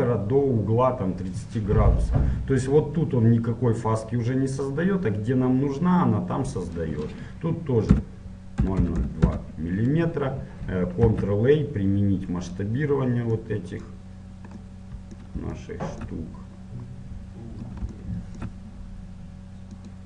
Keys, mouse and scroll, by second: 9.4 KP_0, 12.8 ctrl+a, 13.6 middle click, 14.2 middle click, 14.4 middle click, 14.8 middle click, 15.0-19.2 middle drag.